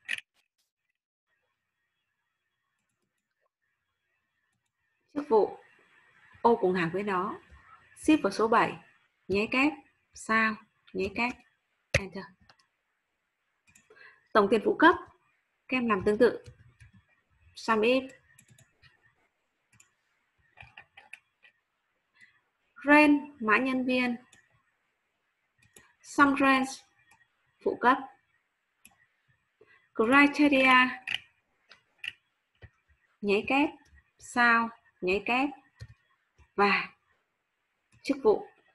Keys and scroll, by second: 8.0 shift+7, 33.5 shift+', 34.2 shift+8, 35.1 ', 35.8 7.